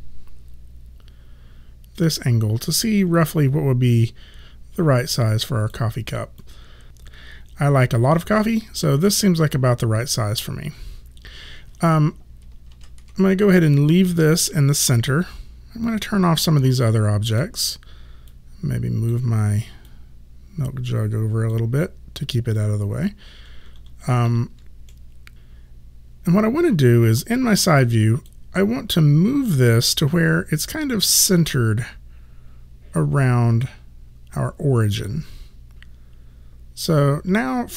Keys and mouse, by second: 3.2 w, 3.9 click, 6.4 click, 12.7 ctrl+z, 15.9 click, 24.9 middle click, 27.8 click, 31.4 click.